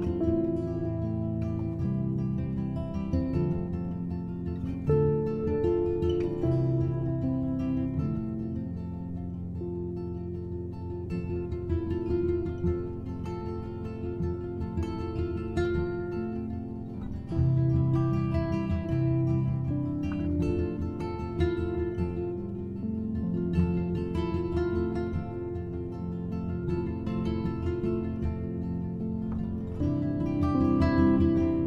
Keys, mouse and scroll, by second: 2.0-6.8 drag, 8.5-9.4 scroll up 4, 10.2 click, 11.3 click, 16.0-17.3 drag, 17.3-18.0 shift+middle drag, 18.0-18.8 scroll up 1, 18.8-23.6 drag, 23.8 click, 25.1-26.0 drag, 26.0 scroll up 2, 26.4 click, 27.0 shift+a, 30.9-31.6 drag.